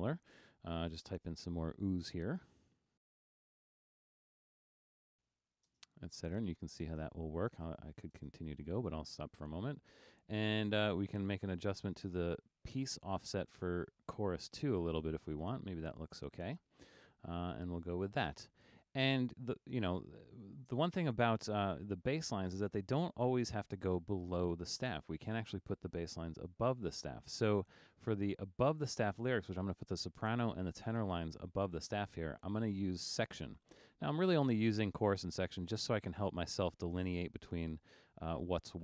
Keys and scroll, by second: 3.0-5.8 typing, 7.0 space.